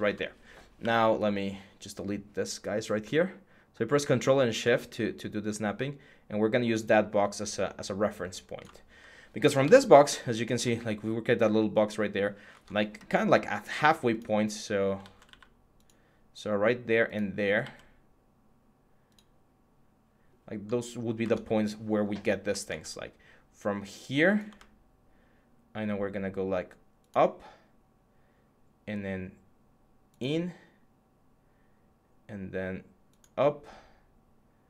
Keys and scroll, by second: 0.6 x, 9.4 Tab, 12.3 Tab, 14.8 ctrl+z, 15.0 x, 17.4 ctrl+z, 21.0 Tab, 22.4 Tab.